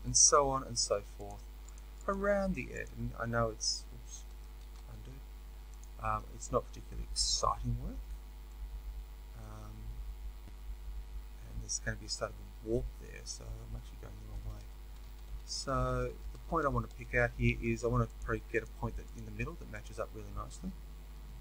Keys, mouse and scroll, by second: 0.0-1.2 shift+middle drag, 1.2 click, 1.6 shift+click, 3.1 f, 4.6 ctrl+z, 5.7 shift+click, 7.8 f, 8.5-18.1 middle drag, 14.2 ctrl+z, 18.1 click, 18.6 shift+click.